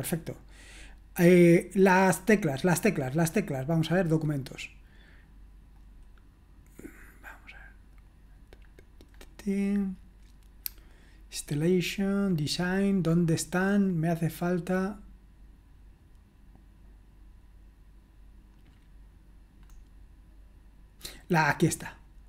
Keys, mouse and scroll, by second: 4.0 click, 4.4 click, 5.7 click, 8.6-10.1 scroll down 2, 10.6-11.3 scroll down 2, 11.3-12.7 scroll down 1, 12.7-13.4 scroll up 3, 14.8 click, 19.6-21.9 scroll down 2, 21.9 click.